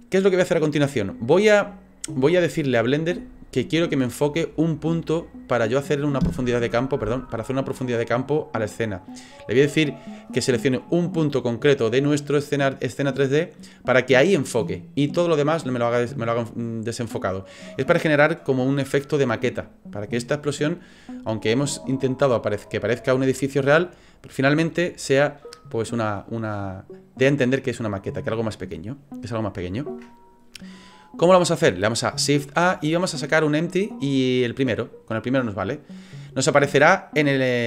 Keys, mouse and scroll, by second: 31.0 right click, 32.4 shift+a.